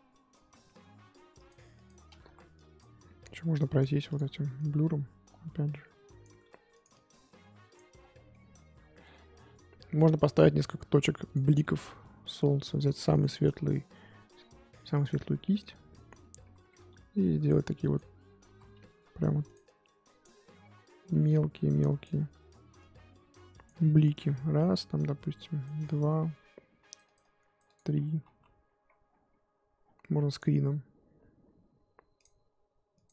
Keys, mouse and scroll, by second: 0.4 ctrl+z, 0.5-1.3 scroll down 2, 1.3 click, 2.2 ctrl+z, 2.5-6.4 drag, 6.4 f, 6.9-7.9 drag, 7.9 scroll down 1, 8.1-9.2 middle drag, 9.2-9.7 scroll up 1, 11.3 click, 11.6-13.2 middle drag, 13.2 click, 14.9 click, 15.4-16.8 middle drag, 16.8 f, 17.8 click, 18.5 ctrl+z, 18.9 f, 19.6-27.9 drag, 27.9-28.8 scroll down 9, 28.8-29.5 scroll up 10, 29.5-32.2 scroll down 1, 32.2-33.1 drag.